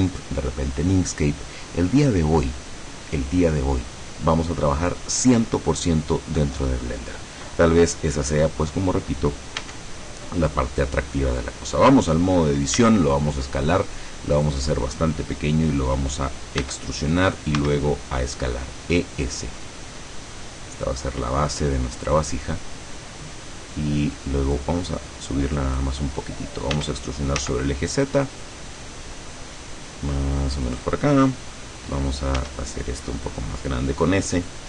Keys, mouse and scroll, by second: 9.7 Tab, 12.9 s, 14.4 click, 16.7 e, 17.7 s, 22.1 click, 24.7-26.1 drag, 26.9 e, 30.8 click, 32.5 s, 34.5 click.